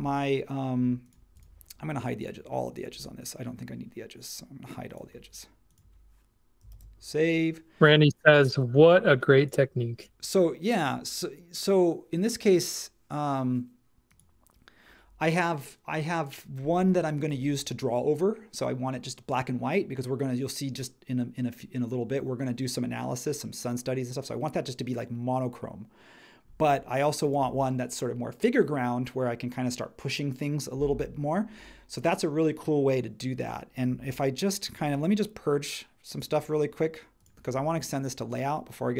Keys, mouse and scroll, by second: 6.7 super+s.